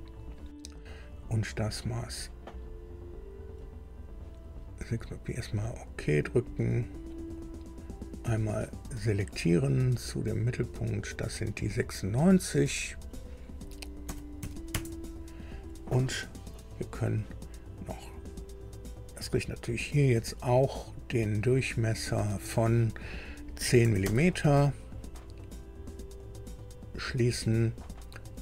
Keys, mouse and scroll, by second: 5.3 click, 8.7 click, 11.3 click, 12.7 click, 14.0 KP_9, 14.4 KP_6, 14.7 KP_Enter, 15.9 scroll down 2, 17.8 scroll up 2, 18.9 click, 20.8 click, 21.9 click, 23.6 KP_1, 23.8 KP_0, 24.0 KP_Enter, 26.2 click.